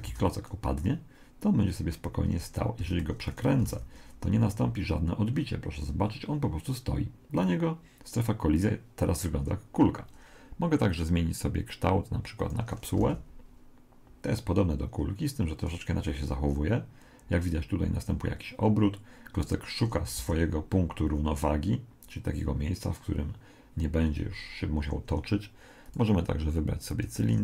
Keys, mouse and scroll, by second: 0.1 alt+a, 2.3 Escape, 2.8 r, 3.7 alt+a, 5.4 middle click, 9.8 Escape, 11.4 click, 13.0 alt+a, 20.3 z, 24.8 Escape, 25.8 click.